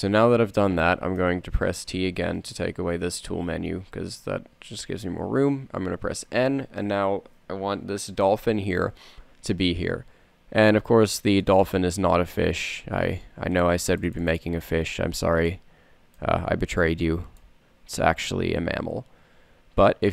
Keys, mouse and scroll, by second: 2.8 t, 4.1 n, 11.5-14.3 middle drag, 16.1-19.2 middle drag.